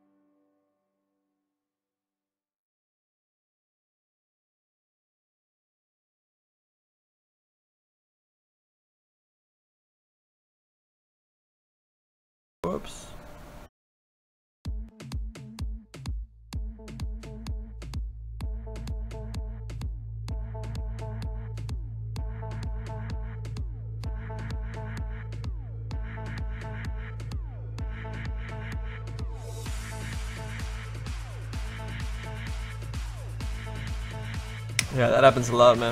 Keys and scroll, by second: 3.6 s, 6.2 s, 11.8 z.